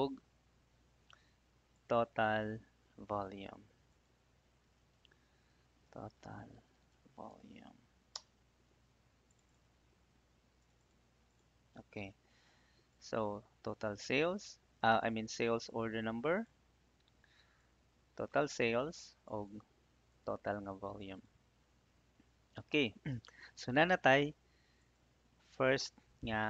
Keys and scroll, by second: 5.1-7.2 typing, 8.1 Return.